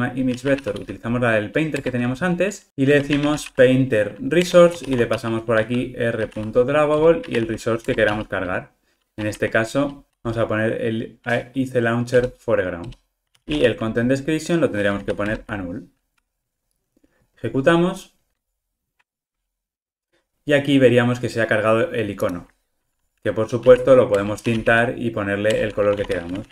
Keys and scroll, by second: 1.8 Return, 4.6 Return, 12.2 Return, 15.3 Return, 17.2 ctrl+r, 25.5 Return.